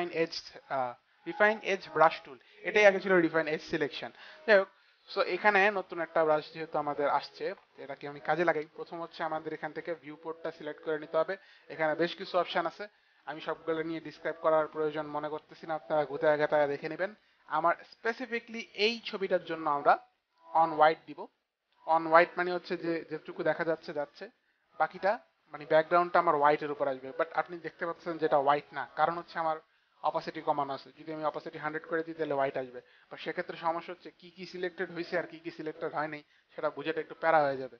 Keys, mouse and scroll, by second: 9.4 click, 22.0 click, 30.7 click.